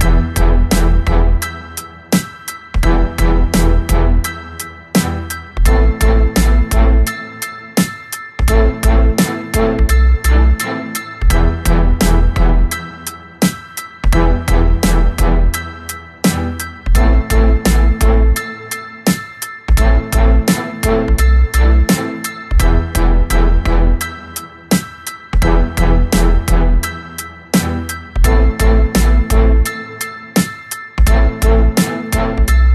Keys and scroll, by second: 0.1 b, 6.0 Escape, 6.1 3, 6.7 r, 9.1 w, 10.2 Escape, 14.9 3, 15.4 shift+Tab, 15.8 Escape, 16.4 shift+h, 17.0 Escape, 17.6 shift+r, 18.3 Escape, 18.8 shift+w, 19.5 Escape, 20.5 ctrl+z, 21.9 shift+w, 23.4 1, 23.4 0, 24.0 Return, 25.0 Escape, 26.4 u, 27.6 3, 29.0 m, 29.7 1.